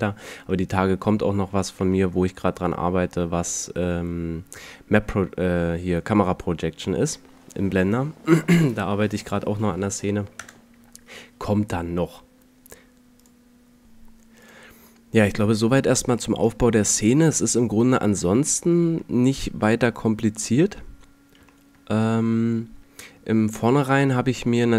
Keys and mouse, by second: 10.2 KP_0, 15.4 middle click, 15.5 middle click, 17.3-18.0 middle drag, 18.8 middle click, 19.5 middle click, 21.4 middle click.